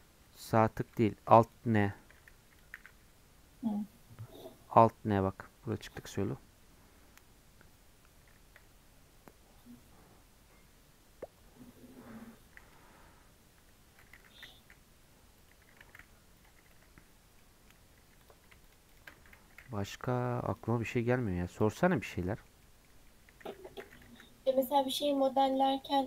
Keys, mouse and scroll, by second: 0.2 Tab, 0.5 middle click, 1.4-2.7 shift+drag, 2.7 alt+n, 13.6 Tab, 13.9 Tab, 14.1 g, 17.4 middle click, 18.0 3, 18.2 click, 19.2 g, 20.7 middle click, 21.6 click, 21.9 shift+middle click, 22.5 scroll up 1, 22.6 middle click, 22.9 scroll down 4, 23.1 middle click, 23.6 Tab, 23.8 g, 25.2 middle click, 25.5 click, 25.8 middle click.